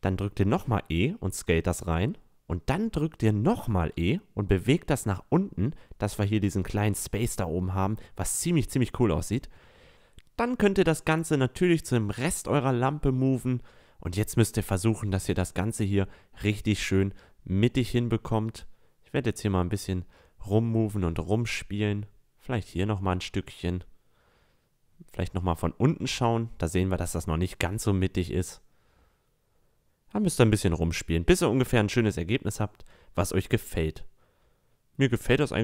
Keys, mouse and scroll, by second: 0.1 s, 3.3 e, 6.1 Tab, 10.0-10.8 middle drag, 10.8 click, 11.7-13.2 drag, 13.2 KP_7, 17.7 click, 21.6-23.4 drag, 23.5-23.9 middle drag, 24.0 middle drag, 24.1 middle drag, 25.2 middle click, 25.4 middle click, 26.6-28.4 drag, 29.2-29.8 middle drag, 31.5-32.4 drag, 32.4 a, 32.6-33.9 middle drag, 35.1-35.6 middle drag.